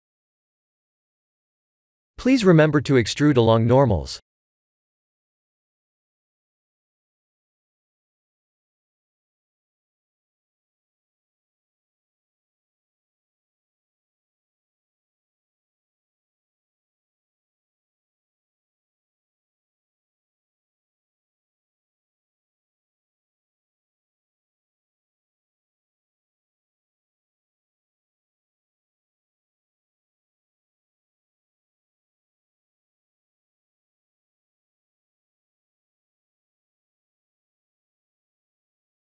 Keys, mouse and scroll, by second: 2.7 click, 4.4 click, 11.7 Tab, 12.1 middle click, 13.6 click, 14.0 middle click, 14.7-15.1 scroll down 3, 15.0 middle click, 18.6 click, 18.9 right click, 20.2 click, 20.7 right click, 21.4 click, 22.4 scroll up 5, 23.9 click, 25.2 click, 25.8 click, 27.6 click, 28.6 click, 29.0-29.6 scroll down 5, 29.4 middle click, 31.2 middle click, 33.5 click, 34.2 middle click, 37.2-39.1 scroll down 8, 37.9 middle click.